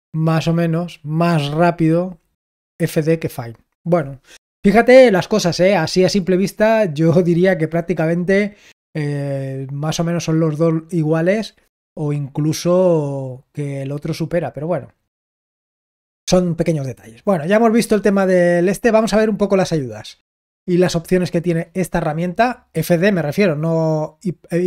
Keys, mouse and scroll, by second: 13.9 click.